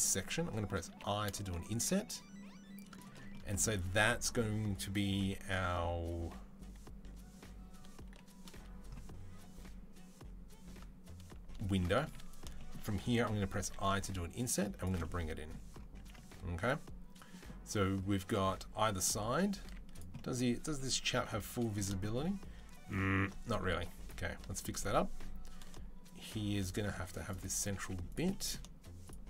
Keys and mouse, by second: 0.7 i, 1.3-13.4 shift+right drag, 13.5 e, 15.9 Tab, 17.6-18.8 right drag, 19.5-21.0 drag, 19.5 z, 20.7 KP_3, 21.0 right click, 21.0 KP_1, 21.7 shift+click, 22.1-23.1 right drag, 23.1 ctrl+click, 23.5 ctrl+z, 23.6 ctrl+z, 23.9 ctrl+z, 26.8 z, 27.6 right click, 27.6 z, 28.5-29.2 shift+drag.